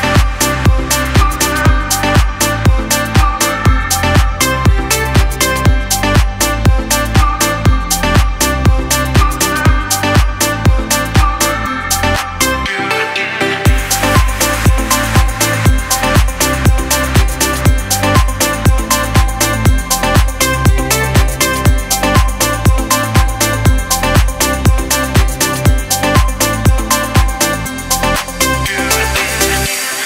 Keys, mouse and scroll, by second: 3.3-5.9 drag, 7.0 u, 8.0 click, 16.7 space, 16.8 click, 17.2 space, 18.5 u, 21.7 u, 22.0-28.3 drag, 28.7-30.0 scroll up 1.